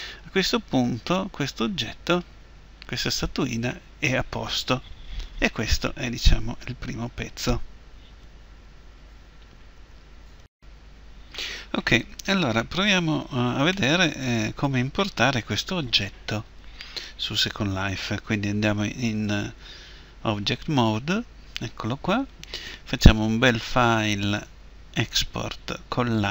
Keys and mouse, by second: 13.9 click, 19.1 Tab, 23.2-26.3 drag.